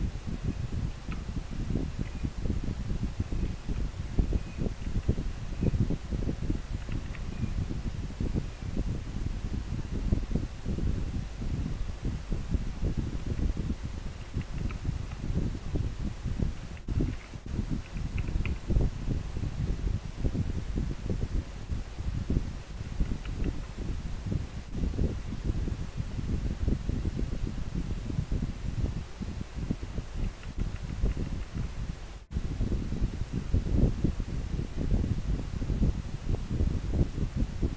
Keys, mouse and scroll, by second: 2.2 scroll up 1.